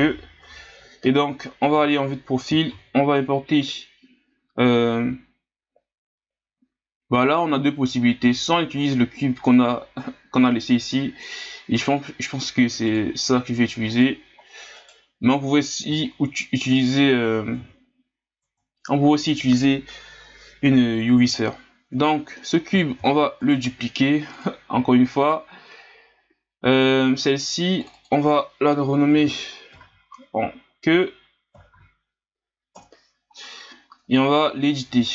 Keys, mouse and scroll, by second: 1.7 KP_3, 2.7 shift+a, 12.9 click, 13.9 click, 14.4-14.8 scroll down 3, 14.8 right click, 16.1 scroll up 1, 17.6 Tab, 18.4 Tab, 23.0 shift+d, 24.3 click, 26.8 right click, 27.8-30.9 drag, 34.0 Tab, 34.9 Tab.